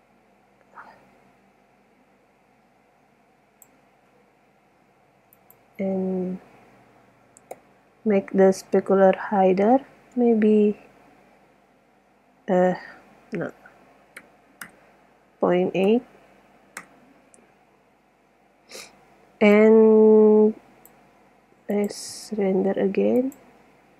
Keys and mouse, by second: 5.6 click, 10.2 BackSpace, 15.3-18.5 middle drag, 19.8-21.5 drag, 21.5 middle click, 21.8-22.2 drag.